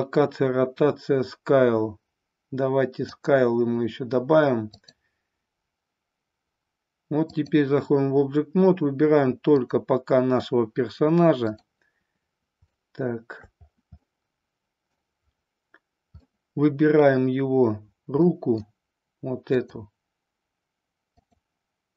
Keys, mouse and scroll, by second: 4.6-7.5 drag, 9.4 click, 11.6 click, 12.8-13.6 shift+middle drag, 14.0-15.0 middle drag, 16.2-17.1 middle drag, 18.2-18.8 middle drag, 19.5 click, 21.2 click.